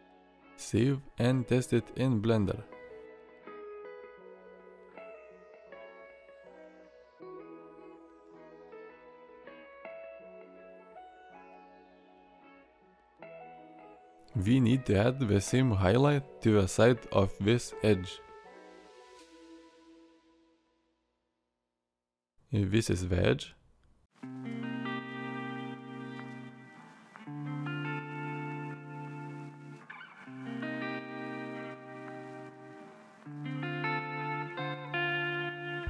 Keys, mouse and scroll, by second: 6.3 Tab, 7.3 alt+r, 8.3 middle drag, 9.0-10.1 middle drag, 10.4 middle drag, 11.1 middle click, 11.8-12.6 middle drag, 12.7-13.4 middle drag, 13.6 shift+middle drag, 14.0 middle click, 18.8-19.3 drag.